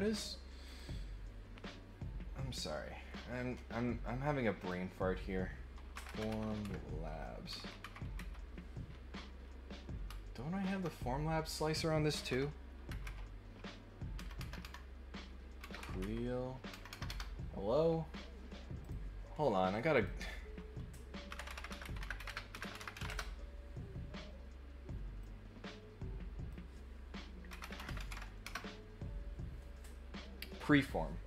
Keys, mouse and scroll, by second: 0.6 click, 4.5 click, 18.8 click, 19.9 click, 25.2-26.5 drag.